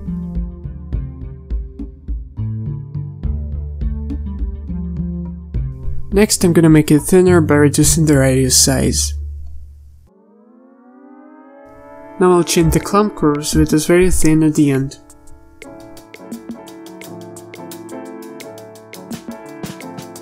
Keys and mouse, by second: 0.2 ctrl+z, 1.3 z, 4.6 z, 5.3 z, 5.7 z, 11.1 click.